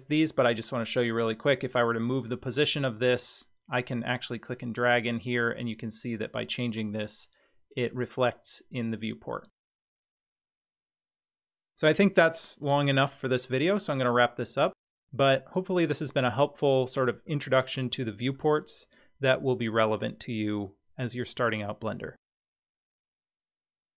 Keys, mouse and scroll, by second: 1.1-3.8 drag, 4.5-5.6 drag, 17.3-18.4 middle drag.